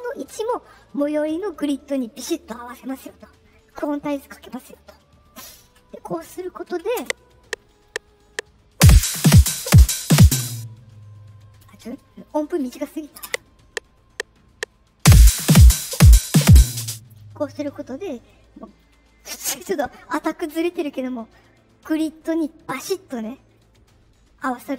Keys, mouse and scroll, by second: 4.6 click, 6.9 space, 10.3 space, 13.2 space, 16.7 space, 17.7 middle click, 17.7-18.0 scroll up 2, 18.8 middle click, 18.8 scroll up 2, 23.5 middle click.